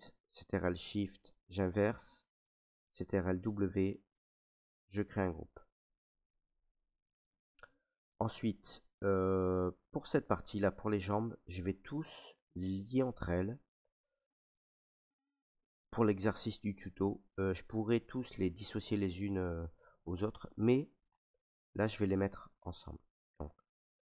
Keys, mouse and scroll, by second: 0.5 ctrl+right click, 1.2 click, 3.3 ctrl+w, 5.5 click, 7.3 right click, 8.9 right click, 9.6 alt+right click, 11.1 ctrl+right click, 11.8 right click, 12.8 ctrl+right click, 14.8 right click, 16.6 right click, 20.3 right click, 21.1 click, 21.9 click, 22.8 click, 23.8 shift+right click.